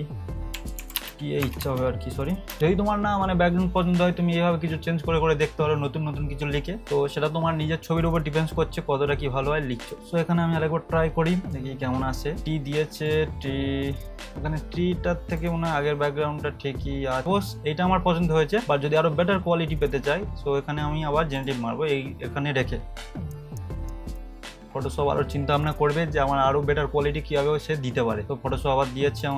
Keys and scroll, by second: 0.5-2.5 typing, 23.3 3.